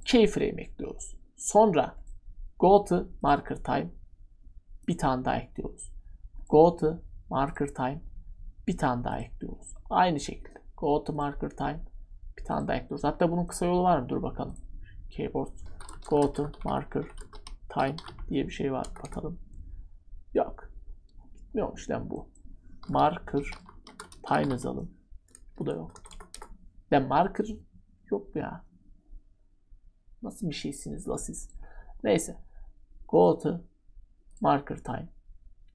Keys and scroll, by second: 15.4-19.0 typing, 22.6-25.8 typing.